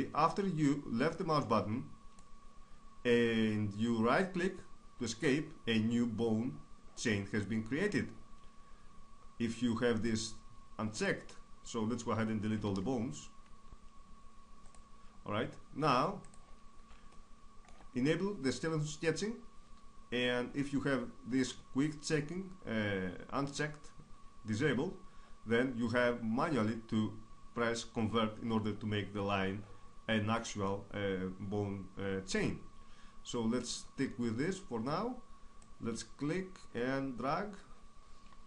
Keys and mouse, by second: 4.4 right click, 7.3-11.0 middle drag, 11.0-14.8 drag, 12.6 x, 15.2 middle click, 15.4 middle click, 16.3-18.8 drag, 35.6-37.3 drag, 38.0 right click.